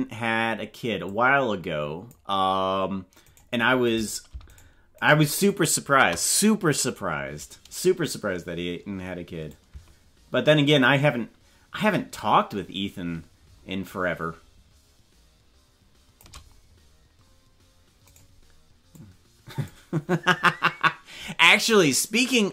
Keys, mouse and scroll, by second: 1.0-2.1 drag, 3.4 right click, 3.9 right click, 4.6 shift+right click, 5.1 right click, 5.7 right click, 9.5-11.8 shift+drag, 14.6-16.2 shift+drag, 18.2 right click, 18.9 click.